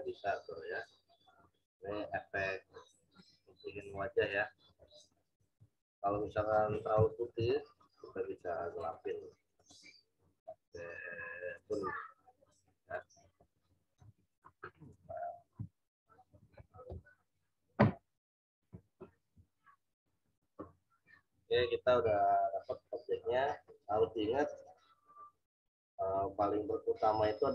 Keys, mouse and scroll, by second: 5.5 ctrl+z, 6.2 ctrl+alt+z, 8.7 right click, 9.6 click, 13.9 z, 14.3 alt+click.